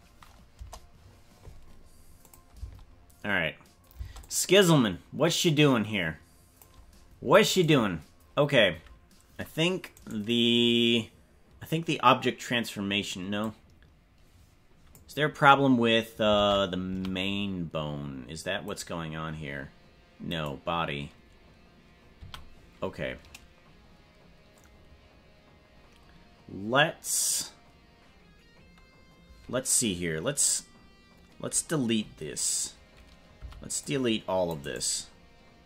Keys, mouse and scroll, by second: 0.5 KP_0, 2.3 click, 2.5 space, 4.1 space, 4.2-6.7 drag, 7.5 right click, 9.9 right click, 13.5-14.9 drag, 16.3 ctrl+Tab, 16.9 a, 18.7 right click, 20.3 right click, 22.2 a, 33.3 c.